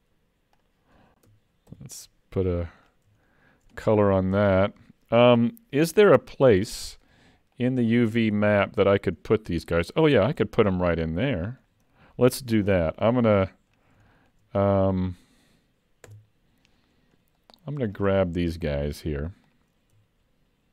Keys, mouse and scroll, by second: 0.6 click, 1.7 shift+k, 2.5 alt+a, 2.9 scroll down 4, 3.3 shift+middle click, 3.8 middle click.